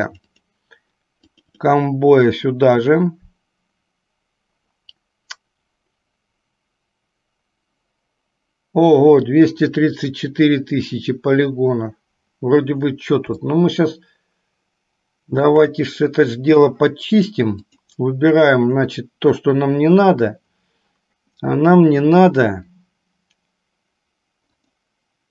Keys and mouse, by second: 13.8-16.0 shift+middle drag, 17.7 click.